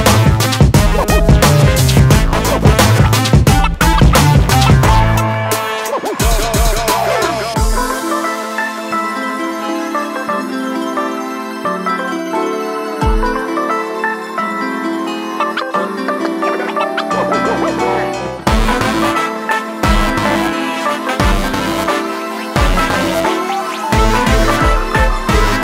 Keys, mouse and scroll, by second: 1.4 click, 9.7 click, 10.4 middle click, 12.8 middle click, 22.2 click, 23.0 click.